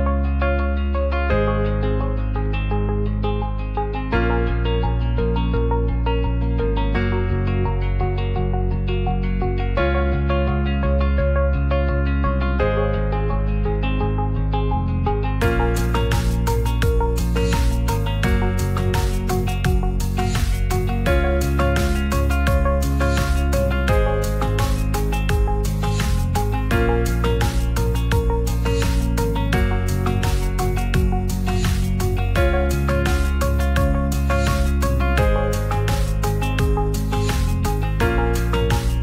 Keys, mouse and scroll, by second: 0.1 click, 1.0 click, 1.2 click, 2.6-4.4 shift+drag, 5.3 drag, 5.7-6.4 drag, 7.0 click, 7.5 click, 8.1 click, 8.7 right click, 9.7 shift+middle drag, 16.6 shift+middle click, 17.1 ctrl+s, 17.5 shift+middle click, 18.5 middle click, 18.8 Tab, 19.8 middle click, 20.7 Tab, 21.0 middle click, 21.6 shift+middle drag, 21.9 Tab, 22.3 middle click, 22.7 3, 22.8 click, 23.1 middle click, 23.6 shift+d, 25.2 s, 26.0 click, 26.2 s, 26.4 shift+z, 27.1 middle click, 28.7 ctrl+a, 29.1 Tab, 29.5 Tab, 30.3-31.5 right drag, 31.9 Tab, 32.7-33.7 right drag, 34.9 ctrl+a, 35.9 click, 36.3 click, 36.9-38.3 shift+drag.